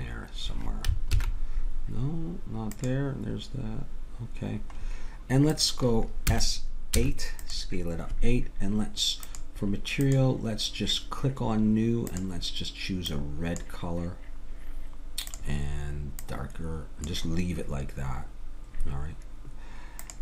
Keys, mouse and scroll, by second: 1.1 alt+h, 2.7-4.6 drag, 5.5-7.3 drag, 6.3 s, 9.2-18.8 drag, 20.0-20.2 drag.